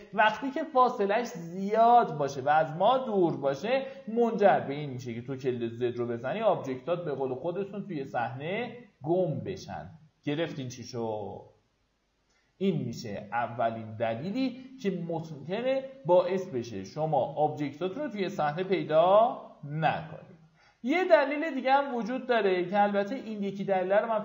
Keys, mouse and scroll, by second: 5.2 z, 6.0-10.1 scroll down 1, 13.3 click, 14.5 w, 16.4 right click, 18.6 z, 19.5-20.3 scroll down 1, 20.5 alt+middle click, 21.0 q, 21.4-23.2 scroll up 1, 23.2 w.